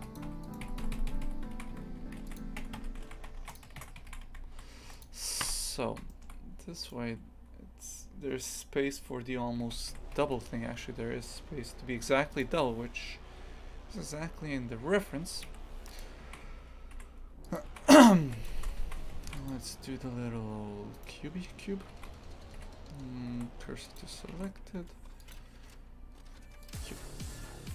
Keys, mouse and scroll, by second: 0.0-1.6 typing, 0.4 right click, 2.6 Tab, 2.8 KP_Divide, 3.1 shift+f, 5.4 KP_3, 6.1 shift+middle click, 6.8 right click, 9.6 shift+d, 10.2 g, 13.3 scroll down 2, 15.5 Delete, 16.0 click, 16.3 shift+f, 17.6 click, 17.7 shift+f, 21.0 right click, 24.0 shift+s, 26.7 shift+a.